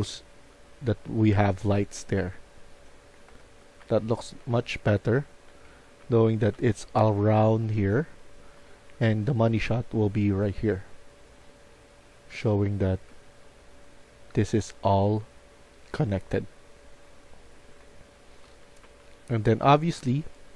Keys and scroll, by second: 0.0-9.5 typing, 11.8-13.5 typing, 16.5 d, 17.7-18.9 typing.